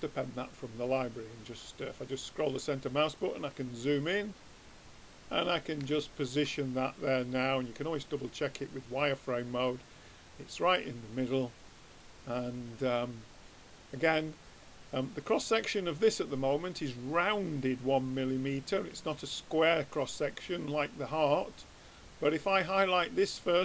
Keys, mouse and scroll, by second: 2.6-5.2 drag, 7.6-9.4 drag, 11.1-14.6 drag, 14.6 click, 20.2-21.8 drag, 21.8-23.6 drag.